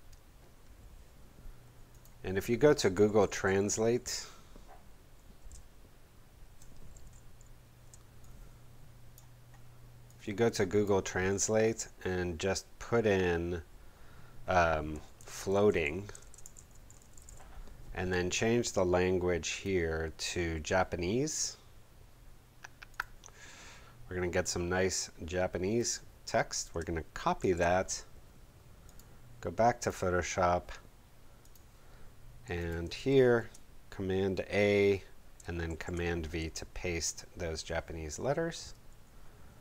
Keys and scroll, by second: 2.5-3.9 typing, 4.0 shift+Return, 7.0 shift+super+b, 15.1-17.7 typing, 27.3 shift+super+c, 33.0 shift+super+a, 35.7 shift+super+v.